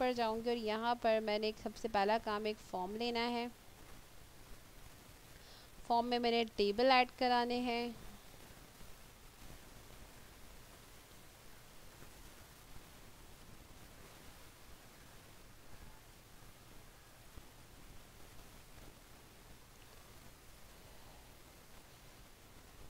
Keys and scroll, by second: 14.5 Delete, 21.4 e, 22.1 f.